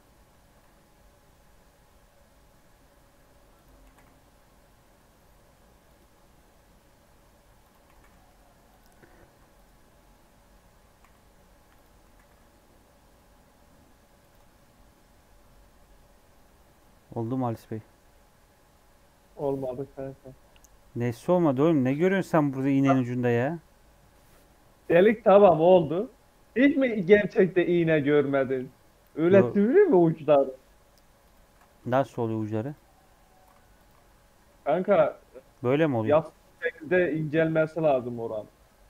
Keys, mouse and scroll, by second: 0.0 Tab, 0.2 Tab, 0.5 s, 3.8 g, 6.1 Tab, 6.4 Tab, 6.7 middle click, 7.3 3, 7.5 click, 7.8 g, 8.8 m, 10.0 Tab, 10.3 scroll down 1, 10.4 middle click, 10.6 Tab, 11.0 g, 11.5 1, 11.7 click, 12.0 g, 14.3 Tab, 14.5 middle click, 15.1-15.8 scroll down 10, 15.8-16.4 scroll up 13, 16.6 scroll down 3, 16.7-18.1 middle drag, 18.1 scroll up 1, 18.3 middle click, 18.7-20.1 scroll down 12, 20.1-22.8 scroll up 2, 22.8-24.2 scroll up 12, 22.9 middle click, 24.2 middle click, 24.5 Tab, 24.9 middle click, 25.8 Tab, 26.1-26.8 scroll down 5, 26.8 Tab, 30.7 Tab, 31.1 click, 32.1 x, 33.0 scroll up 3, 33.2 2, 33.7 alt+click, 34.3 f, 34.6 Tab, 36.2 Tab.